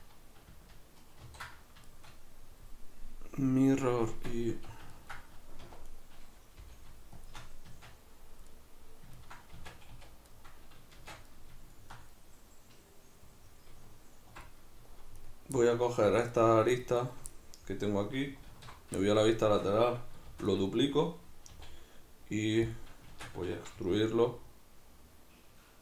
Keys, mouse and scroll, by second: 1.3 ctrl+2, 1.9-5.9 shift+middle drag, 4.1 Tab, 4.5 a, 5.7 1, 5.9 right click, 6.6 g, 7.3 shift+click, 7.7 Tab, 8.5-15.2 middle drag, 9.6 Tab, 9.9 a, 11.0 shift+Tab, 15.2 right click, 15.6-16.3 middle drag, 16.0 2, 16.3-16.8 right drag, 17.0 shift+right click, 17.3-20.6 middle drag, 18.5 alt+q, 20.3 shift+d, 20.6 right click, 21.5 e, 22.8 click, 23.1 shift+Tab, 23.8 g.